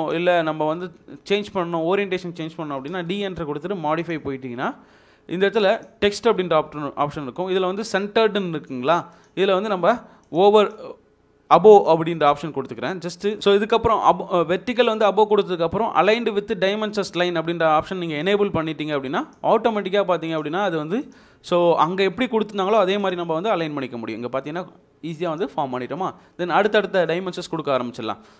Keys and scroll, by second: 1.2 Escape, 2.9 d, 2.9 space.